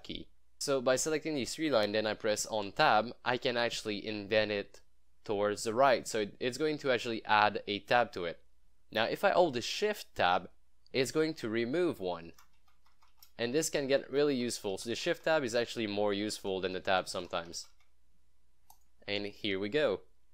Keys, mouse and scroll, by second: 0.6-1.9 drag, 2.7 Tab, 6.0 Tab, 8.1 Tab, 10.2 shift+Tab, 11.3 shift+Tab, 11.8 shift+Tab, 12.6 Tab, 13.5 shift+Tab, 16.6 shift+Tab, 18.7 click, 18.8 click, 19.5 scroll up 1.